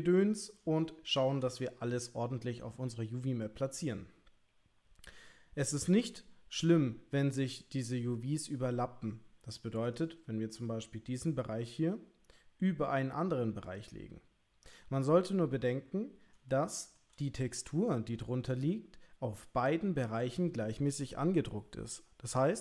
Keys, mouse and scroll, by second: 1.0 shift+middle click, 11.5 g, 16.6 shift+middle click.